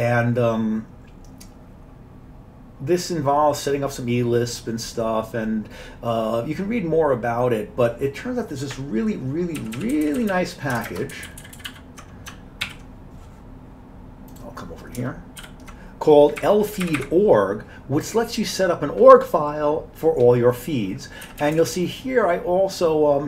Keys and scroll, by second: 9.6-10.1 Down, 10.0 Down, 10.2 Down, 10.9 ctrl+shift+space, 11.2 ctrl+n, 11.3-11.7 ctrl+n, 12.7 alt+w, 15.4 ctrl+y, 16.5 Up, 16.8 Up, 16.9 Up, 17.1 Up, 21.5 Down, 21.6 Down, 21.8 Right, 22.3 Right, 22.5-23.2 Right.